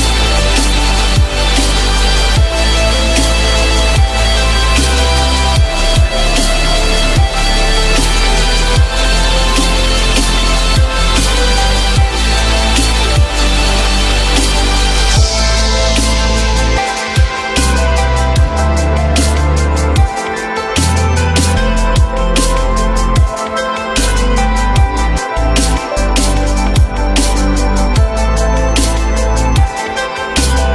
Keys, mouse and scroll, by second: 0.4 F3, 1.2 alt+middle click, 2.2 alt+middle click, 2.4 alt+scroll up 1, 2.9 F3, 4.5 alt+middle click, 6.0 alt+middle click, 7.8 shift+click, 7.9 shift+click, 11.6 typing, 12.1 Return, 13.5 ctrl+z, 16.2-17.2 typing, 20.0 alt+middle click, 25.7 shift+click, 26.8 ctrl+click, 27.6 shift+click, 28.6 ctrl+click, 29.3 shift+click.